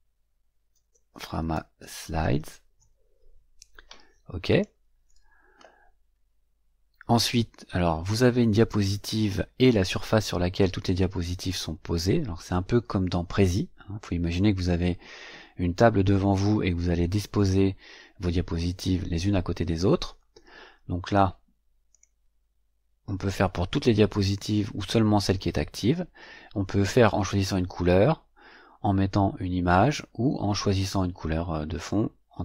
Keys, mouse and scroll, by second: 0.0-3.2 typing, 4.4 click, 21.8 click.